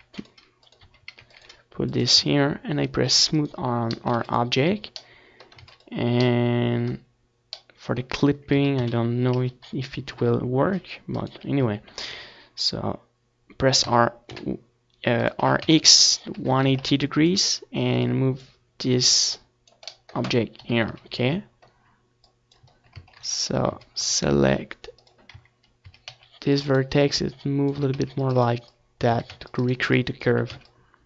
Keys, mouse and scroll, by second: 0.9 r, 3.7-5.6 right drag, 6.4 r, 7.8-9.7 right drag, 7.9 r, 10.0-13.3 drag, 12.6-15.0 middle drag, 13.4 KP_7, 13.6 z, 15.0-16.7 drag, 15.8 Tab, 16.6 a, 17.8-19.5 drag, 18.2 a, 18.7 a, 19.0 c, 19.7-21.3 right drag, 20.0-21.6 drag, 20.8 a, 21.0 c, 21.4 right click, 21.7 click, 21.7 right click, 22.2 a, 23.4 a, 23.6 c, 25.5 a, 25.7 c, 26.8 a, 27.0 c, 28.7 Tab, 29.2 click, 29.6 middle click, 30.2-31.0 drag.